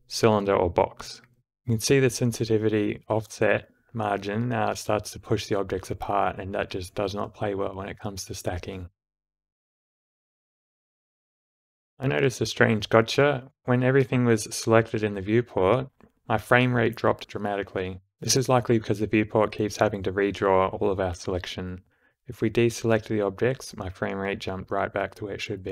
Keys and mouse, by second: 1.9 click, 1.9 d, 2.4-3.7 drag, 5.1 shift+Left, 6.1 space, 6.6 space, 8.3 d, 8.8 click, 11.9 shift+Left, 14.3 space, 18.8 space, 19.8 click, 21.2 shift+Left, 21.7 space.